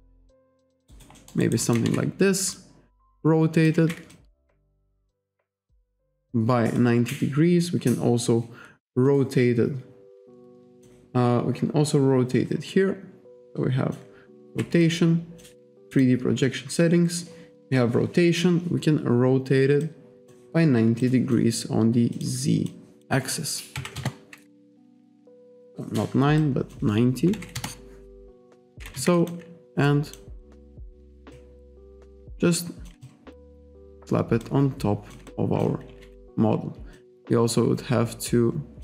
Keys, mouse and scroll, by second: 0.9 alt+right click, 1.5 alt+right click, 1.9 e, 2.6 click, 3.8 ctrl+z, 4.2 alt+click, 5.9 alt+click, 6.8 click, 7.6-8.1 scroll up 1, 8.3 scroll up 1, 9.1 click, 11.4-12.1 scroll down 1, 13.5 click, 14.5 ctrl+z, 14.9 alt+click, 16.0 click, 16.4-17.2 scroll down 1, 17.4-17.8 scroll down 1, 19.9 click, 21.1 click, 22.2 click, 22.7 click, 23.8 9, 25.5 alt+click, 26.4 click, 27.1-27.9 typing, 28.7 alt+click, 28.9 w, 29.2 alt+click, 29.9 click, 30.5 click, 31.4 alt+click, 32.3 click, 33.1 alt+click, 34.5 click, 35.3 alt+click, 36.1 e, 37.0 click.